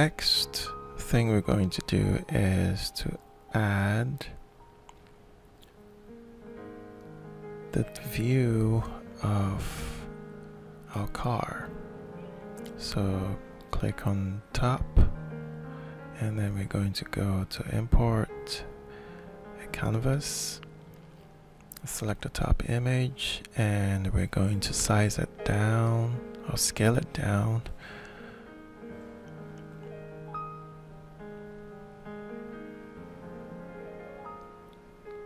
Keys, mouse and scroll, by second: 1.2-3.7 middle drag, 3.7 alt+shift+click, 4.8-6.3 alt+shift+drag, 10.6 click, 15.6 click, 17.1 click, 18.0 click, 20.4 click, 20.6 click, 23.6-24.8 ctrl+shift+middle drag, 26.8 click, 28.0-29.0 drag, 29.9 click, 31.6 click, 32.8 click, 34.2 middle click, 35.1 click.